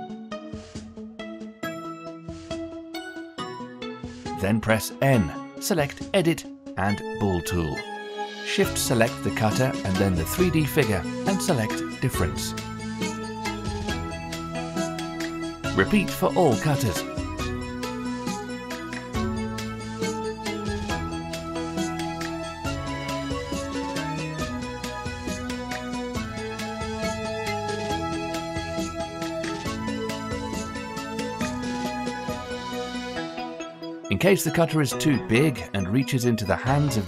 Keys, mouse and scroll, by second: 0.4-2.7 middle drag, 2.7 click, 3.6 n, 5.9 click, 8.0 middle click, 8.4-9.2 scroll up 1, 9.2 click, 10.0 shift+click, 14.0-15.5 drag, 16.3 click, 17.2 shift+click, 18.5-22.7 drag, 22.8 drag, 23.0 shift+click, 23.5-25.4 drag, 25.9 click, 26.1 shift+click, 26.7-28.6 drag, 28.9 click, 29.1 shift+middle drag, 29.3 scroll up 2, 29.4 middle drag, 29.7 shift+click, 30.4 click, 31.3-31.9 shift+middle drag, 31.9 shift+click, 32.6-33.9 scroll up 3, 33.9-36.1 shift+middle drag, 36.1 scroll down 5, 36.7-37.0 shift+middle drag.